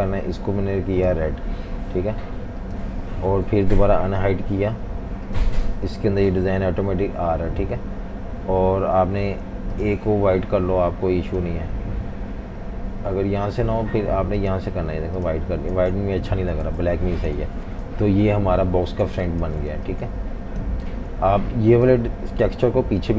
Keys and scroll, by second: 3.7 alt+super+3, 15.8 super+z, 16.7 super+z, 17.4 v, 18.0 super+-, 18.2 super+-, 18.9-20.9 typing.